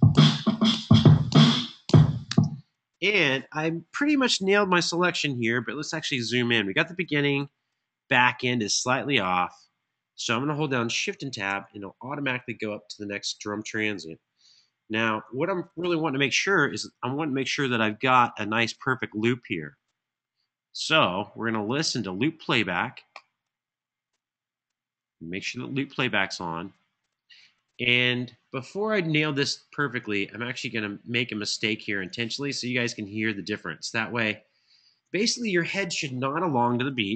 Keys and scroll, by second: 1.0 typing, 4.0 typing, 5.2 super+], 5.4 super+], 5.8 super+], 7.0 super+], 7.0 Right, 11.2 Home, 14.9 alt+f.